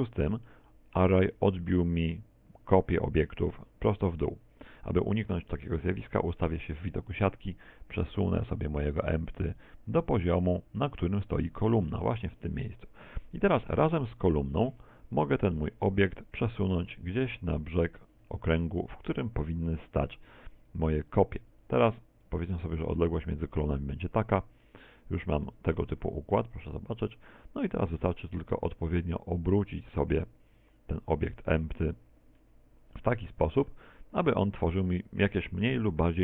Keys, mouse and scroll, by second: 4.5 middle click, 5.6 KP_1, 7.6 click, 11.9 middle click, 14.1 middle click, 14.1 shift+right click, 15.0 KP_1, 15.3 KP_7, 16.7 click, 18.7 shift+middle click, 20.7 right click, 21.7 click, 24.7 middle click, 25.5 middle click, 26.0 z, 26.3 middle click, 27.8 r, 32.4 click, 32.4 middle click, 33.7 middle click, 35.8 KP_7.